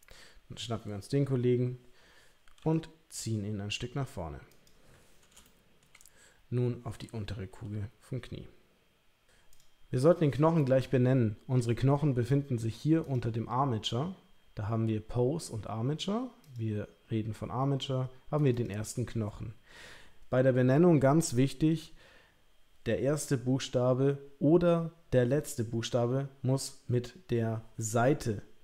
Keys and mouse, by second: 2.6 g, 5.4 shift+middle click, 7.4 g, 9.5 click, 13.0 click, 16.5 click, 18.5-28.6 drag.